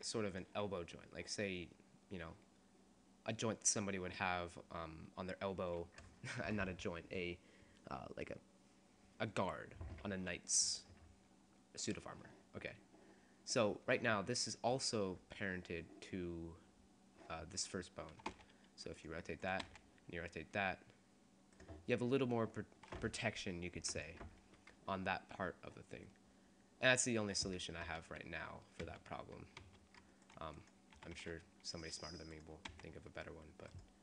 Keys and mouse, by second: 17.7 right click, 18.3 r, 19.7 r, 21.1 click, 23.5-26.0 drag, 28.1 ctrl+z, 28.9 ctrl+z, 29.8 ctrl+z, 30.4-32.0 right drag, 31.2 s, 32.0 click, 32.4 right click, 32.6 click, 32.8 r, 33.8-34.0 drag.